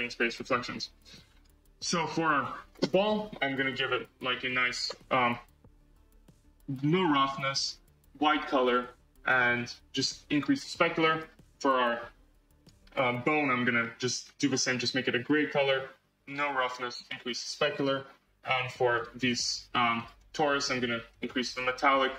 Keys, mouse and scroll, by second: 0.6 scroll, 1.3 click, 2.3 click, 4.5-11.1 drag, 12.6-14.1 drag, 16.3-18.9 drag, 20.0-22.1 drag.